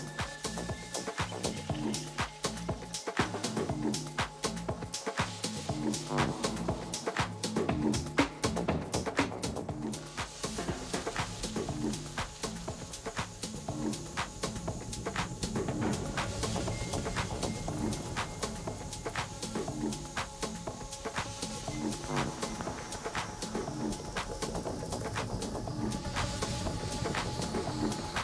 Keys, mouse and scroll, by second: 2.5-4.2 middle drag, 3.6 Tab, 4.9 middle click, 6.2 Tab, 7.8-9.8 right drag, 8.3-9.5 drag, 9.8 middle click, 13.7 a, 14.6-16.5 middle drag, 18.5 Tab, 19.2 Tab, 20.2 a, 20.6 a, 21.0 Tab, 21.8 middle click, 25.0-26.9 middle drag, 27.7-28.2 drag.